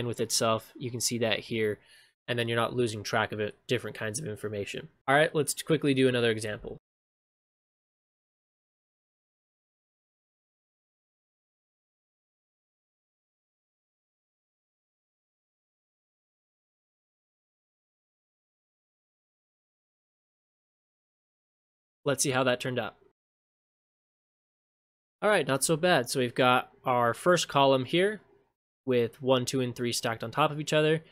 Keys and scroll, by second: 23.8 ctrl+shift+space.